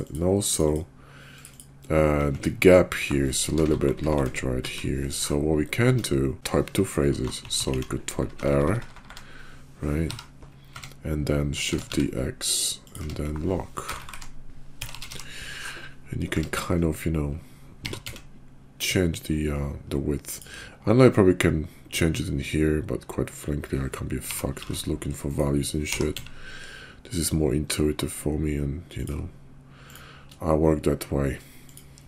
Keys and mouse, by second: 0.1 click, 0.7 click, 1.5 click, 2.3 Tab, 3.4 Left, 3.7 Left, 3.8 Left, 4.0 Left, 4.1 Left, 4.6 Right, 5.8 Tab, 7.1 Right, 7.4 Right, 7.6 Right, 7.7 Right, 8.2-10.0 typing, 10.7 Tab, 11.6 shift+d, 13.0 Tab, 13.9-15.1 typing, 16.3 Tab, 17.8 g, 24.2 g, 25.9 g, 31.6 click.